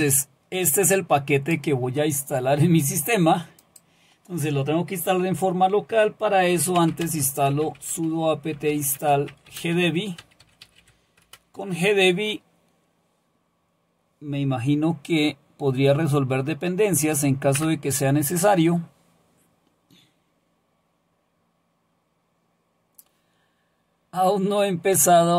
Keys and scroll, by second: 6.3-11.3 typing, 17.5 Return.